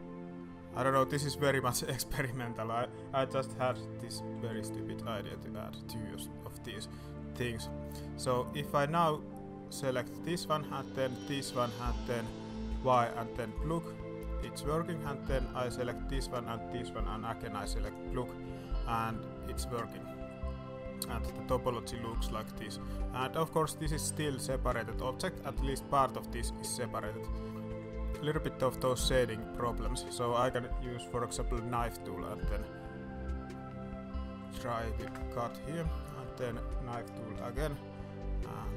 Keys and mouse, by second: 1.6 alt+a, 3.6 g, 7.8 middle click, 12.7 y, 14.4 alt+a, 16.1 shift+middle click, 17.1 y, 18.8 alt+a, 19.0 middle click, 19.5 middle click, 19.8 Tab, 20.0 middle click, 21.4 middle drag, 21.8 shift+middle click, 22.3 Tab, 22.7 middle click, 23.4 click, 24.1 g, 25.5 drag, 26.3 click, 27.6 Tab, 28.9 Tab, 29.6-30.0 middle drag, 30.1 middle click, 30.6 alt+a, 31.3 k, 36.0 shift+middle click, 36.3 alt+a, 37.3 k.